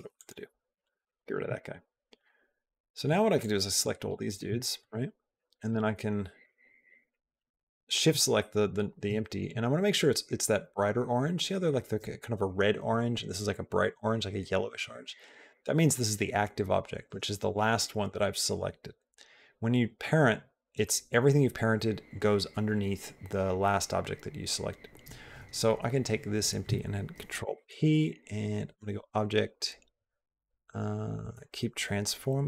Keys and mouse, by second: 0.0 click, 0.5 x, 0.9 shift+middle click, 3.2 click, 4.4 shift+middle click, 5.5 shift+click, 7.1 shift+click, 8.9 shift+middle click, 27.2 ctrl+p.